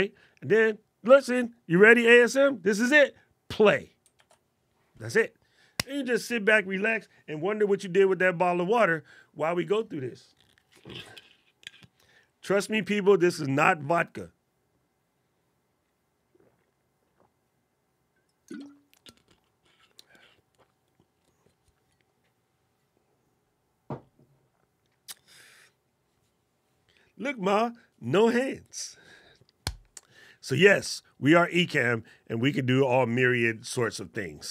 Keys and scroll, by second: 4.0 alt+super+8.